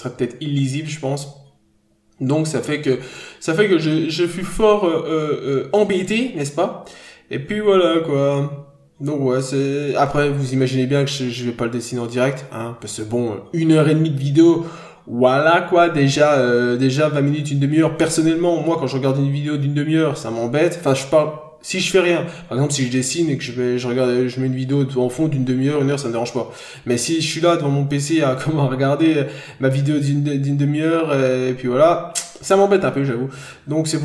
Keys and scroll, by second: 0.8 ctrl+z, 2.0 ctrl+z, 3.8 ctrl+z, 4.5 ctrl+z, 5.3 ctrl+z, 6.0 ctrl+z, 6.6 ctrl+z, 7.2 ctrl+z, 8.6 ctrl+z, 10.8 ctrl+z, 11.4 ctrl+z, 12.8 scroll down 1, 12.9 n, 13.3-13.7 scroll up 1, 14.0 scroll up 1, 14.2 ctrl+z, 14.5 b, 15.3 ctrl+z, 15.9 ctrl+z, 16.7 ctrl+z, 18.4 ctrl+z, 19.7 n, 20.1 scroll down 1, 21.1 scroll up 1, 21.4 ctrl+z, 21.7 b, 22.2 ctrl+z, 22.8 ctrl+z, 23.4 scroll down 1, 24.1 n, 24.7-25.1 scroll up 1, 25.2 scroll down 1, 28.2 ctrl+z, 30.7 ctrl+z, 32.5 ctrl+z, 33.9 scroll down 1.